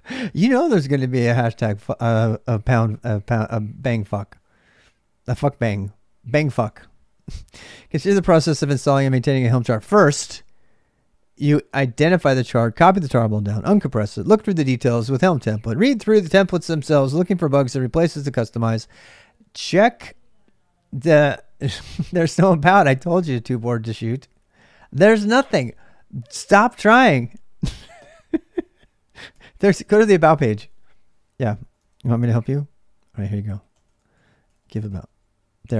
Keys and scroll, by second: 0.0-35.7 typing.